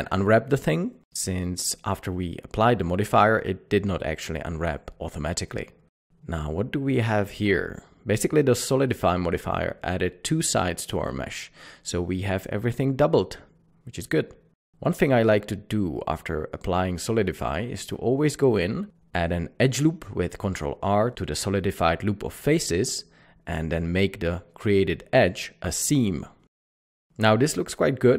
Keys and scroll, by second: 2.1-2.5 typing.